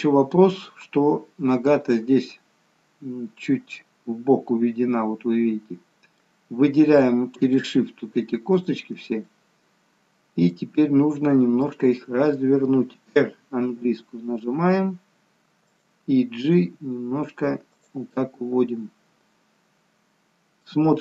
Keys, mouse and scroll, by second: 7.6 shift+click, 8.7 shift+click, 9.4 middle click, 13.7 middle click, 13.7 r, 16.5 g, 18.1 middle click.